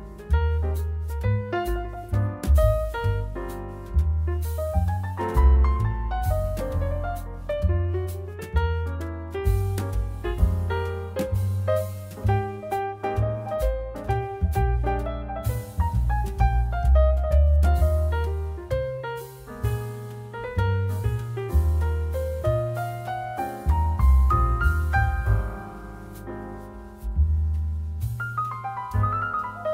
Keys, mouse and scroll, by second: 2.3-29.7 shift+right drag, 5.3 g, 8.6 click, 11.4 click, 12.7-18.4 drag, 14.5 0, 16.2-18.9 middle drag, 22.0 shift+g, 27.6 click, 27.6 middle click, 28.7-29.7 drag, 28.7 middle click.